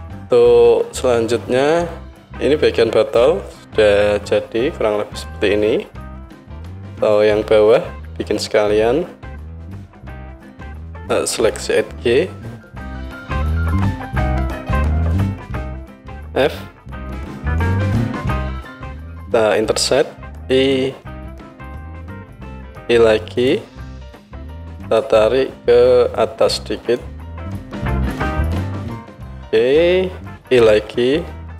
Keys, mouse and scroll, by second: 5.2-9.6 drag, 9.6-13.2 alt+middle drag, 13.2-15.2 drag, 15.2-24.9 middle drag, 17.7 f, 19.8 i, 22.8 i, 24.9-31.5 drag, 30.7 i.